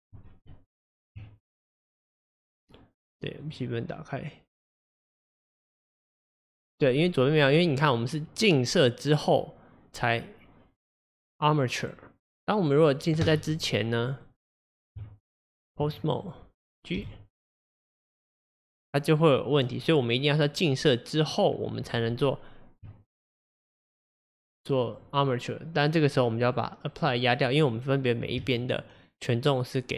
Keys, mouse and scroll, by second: 0.6 Tab, 1.5 click, 3.5 drag, 6.2 click, 12.0-12.9 drag, 14.3 click, 15.0 Tab, 16.3 click, 17.1 g, 22.2 Tab, 23.1 click, 24.5 click, 26.5-28.4 drag, 28.4 Tab.